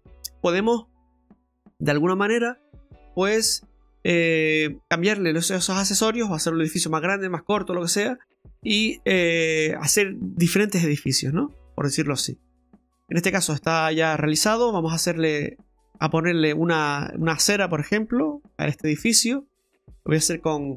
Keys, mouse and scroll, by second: 2.8 middle click, 3.8 middle click, 12.6 scroll up 3, 13.0 middle click, 13.4-13.7 scroll down 2, 13.7 middle click, 14.4 shift+middle click, 14.9 scroll up 2, 15.4 middle click, 18.3 Tab, 18.9 scroll up 2, 19.2-20.2 scroll down 3, 20.2 KP_7.